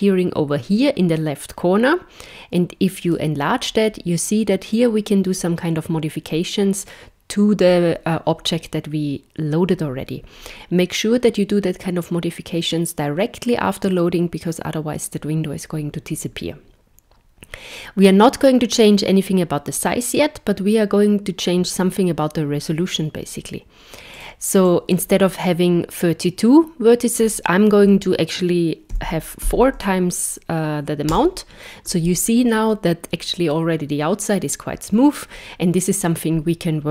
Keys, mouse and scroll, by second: 3.2 click, 24.2 click, 25.1 click.